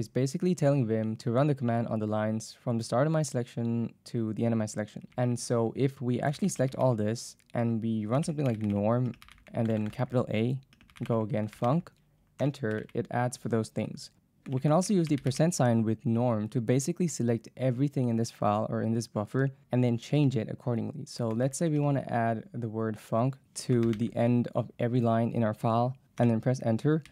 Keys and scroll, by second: 5.1 k, 6.1-7.0 typing, 8.0-12.2 typing, 14.5-15.9 typing, 20.2 space, 21.4 shift+a, 21.8 space, 23.2-24.5 typing, 26.2 Return, 27.0-27.1 typing.